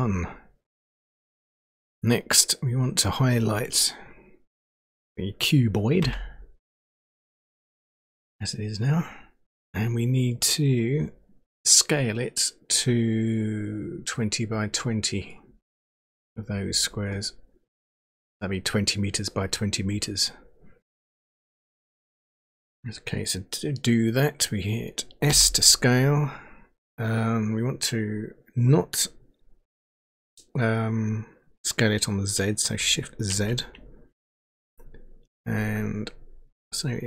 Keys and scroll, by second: 6.0 a, 25.3 s.